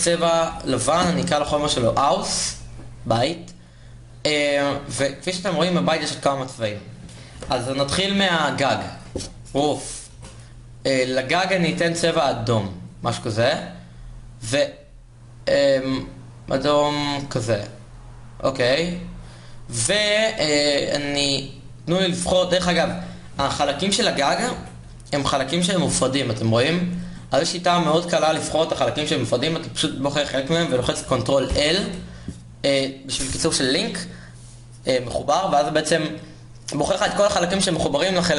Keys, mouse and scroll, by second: 10.4-21.5 drag, 11.5 o, 21.5 Tab, 22.4 a, 24.1 a, 26.0 l, 27.5 g, 28.7 a, 33.0 ctrl+l.